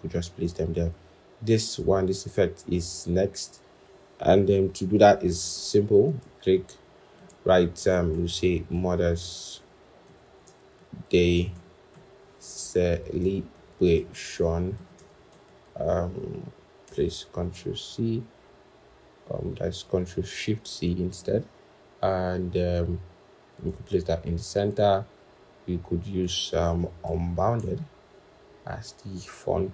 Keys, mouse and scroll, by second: 8.6-11.4 typing, 11.8 Return, 12.4-14.6 typing, 16.7 ctrl+shift+c, 26.9-27.4 typing.